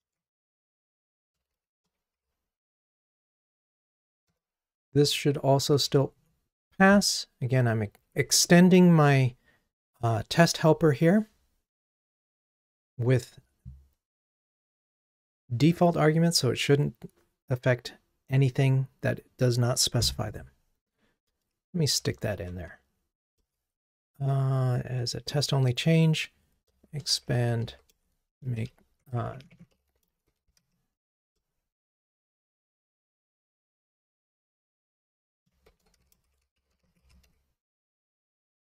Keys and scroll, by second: 4.5 Return, 8.7 ctrl+r, 22.7 super+k.